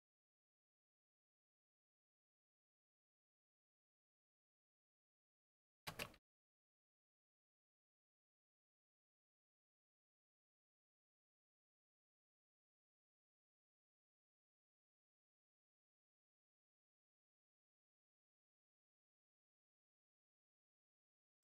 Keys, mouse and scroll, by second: 5.0-7.4 typing, 16.6 Up, 17.4 Up, 17.9 Left, 18.6 Left, 20.3 typing.